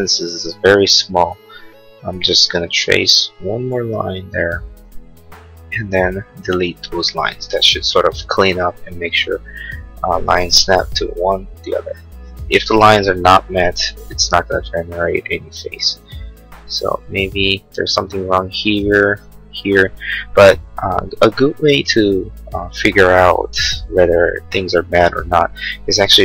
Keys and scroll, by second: 5.1 e, 10.5 l, 11.8 Escape.